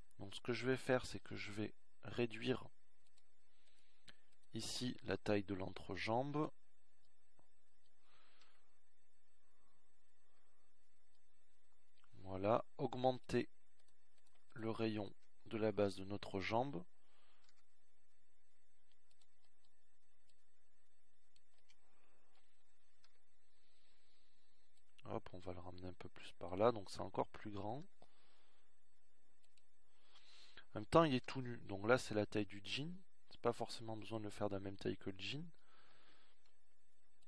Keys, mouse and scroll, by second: 4.4 z, 12.1 KP_1, 14.0 KP_1, 19.5 KP_1, 21.2 s, 26.9 KP_1, 31.8 s, 35.2 s.